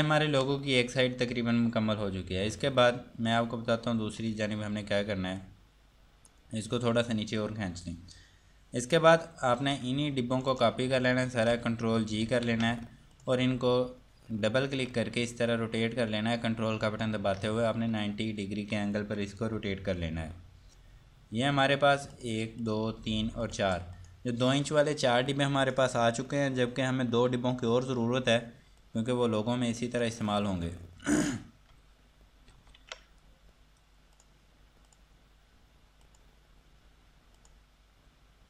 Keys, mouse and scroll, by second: 3.0 click, 9.8 click, 10.7 ctrl+right click, 13.4 click, 21.7 click, 29.0 click, 34.4 click.